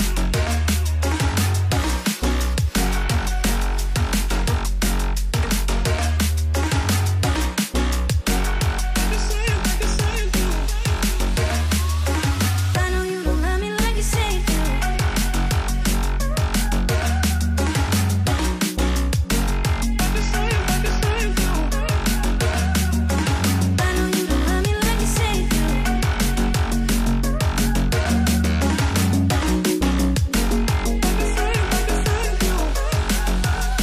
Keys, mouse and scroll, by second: 10.5 g, 17.7 shift+click, 19.1 shift+click, 20.3 v, 21.7 ctrl+t, 25.2 Return, 31.6 ctrl+t.